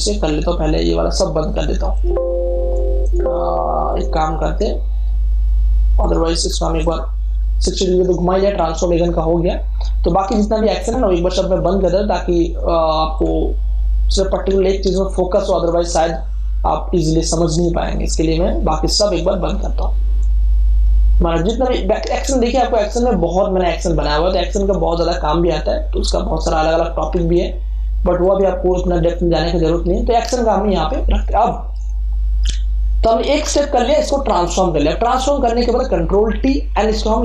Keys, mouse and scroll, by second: 0.1 scroll up 1, 0.8 scroll up 1, 1.9 click, 6.7 click, 10.9 click, 11.0-18.1 drag, 18.1-22.6 drag, 27.3-36.4 drag, 36.4 ctrl+t.